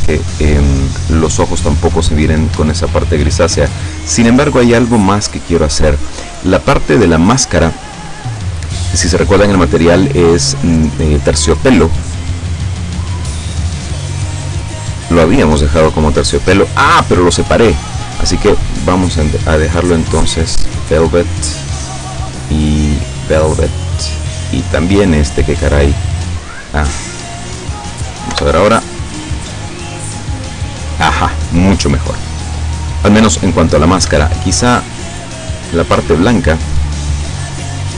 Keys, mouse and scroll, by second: 2.6 Escape, 3.2 scroll up 2, 4.6-5.1 scroll up 2, 5.4 right click, 12.4 right click, 12.8 right click, 13.2 right click, 13.9 right click, 15.0 right click, 16.0 right click, 18.3 click, 20.0 click, 21.4 right click, 22.2 click, 23.2 click, 24.0 right click, 25.7 click, 28.4 F12, 34.1 Escape, 34.8 right click, 37.2 right click, 37.7 right click.